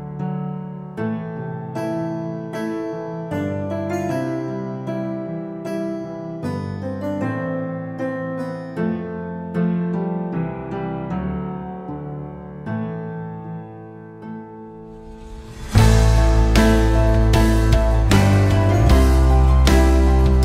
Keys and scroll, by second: 5.4 3, 5.7 0, 6.2 Return, 7.7-8.9 typing, 9.0 Return, 10.6 2, 10.8 0, 11.3 Return, 16.7 1, 17.4 9, 17.8 Return.